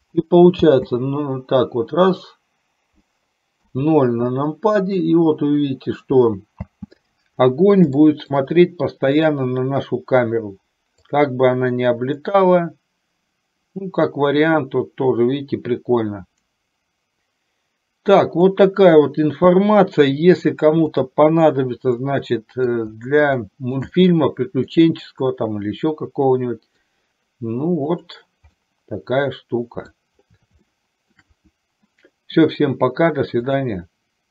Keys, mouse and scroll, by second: 0.7 space, 3.9 KP_0, 6.9 space, 8.1 shift+middle click, 9.4 click, 11.4-18.9 drag, 21.1 click, 22.2 middle click, 23.5 shift+middle click, 24.0 middle click, 25.5-27.0 middle drag, 28.2 click, 28.7-30.0 middle drag, 30.7 shift+middle click, 33.6 click.